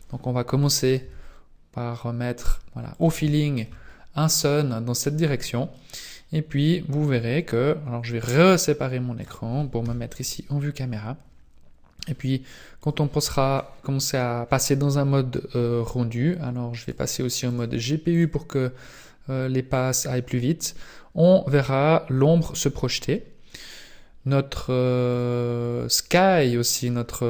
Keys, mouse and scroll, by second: 1.0 r, 3.3 shift+middle click, 3.8-4.1 scroll up 3, 4.2 middle click, 5.3-5.7 scroll down 3, 5.7 middle click, 8.3 click, 9.8 KP_0, 11.9 click, 12.9 click, 16.7 click, 17.3 click, 18.3 click, 25.1 click.